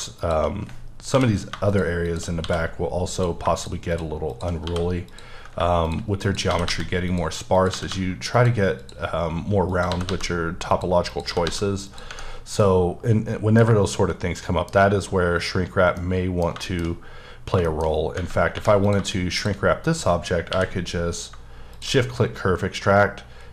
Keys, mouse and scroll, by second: 0.2 shift+click, 1.2 j, 1.7 shift+click, 2.1 shift+double click, 2.4 f, 3.2 click, 3.9 shift+click, 4.3 shift+double click, 4.7 f, 5.1 click, 5.6 shift+click, 6.5 g, 6.7 g, 7.1 click, 7.6 click, 7.7 g, 7.9 g, 8.4 click, 8.8 click, 9.7 click, 9.9 g, 10.1 g, 10.7 click, 11.1 click, 11.3 g, 11.4 g, 11.9 click, 12.3-12.9 scroll down 3, 12.6 middle click, 14.1 scroll down 1, 14.4 middle click, 15.1-16.0 scroll down 1, 16.0 middle click, 16.7 double middle click, 17.3 scroll down 1, 17.7 shift+middle click, 18.6 3, 18.9 click, 20.5 q, 21.7 click, 23.2-23.5 scroll up 1.